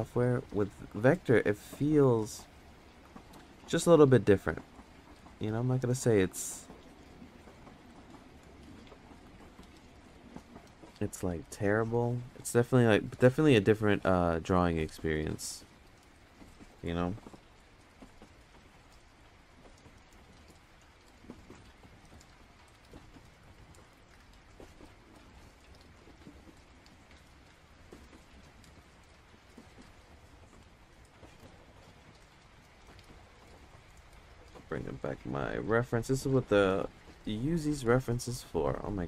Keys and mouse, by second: 0.9 ctrl+z, 1.3 click, 2.0 ctrl+z, 2.2 click, 3.0 ctrl+z, 3.3 click, 4.3 ctrl+z, 4.6-5.6 drag, 6.3 ctrl+z, 8.3 click, 9.2 ctrl+z, 11.3-11.9 drag, 14.8 click, 16.0 click, 17.8 r, 23.0 g, 30.0 Tab, 33.1 click, 34.8-35.8 drag, 36.4-37.3 drag, 37.9 click, 38.9-39.0 drag.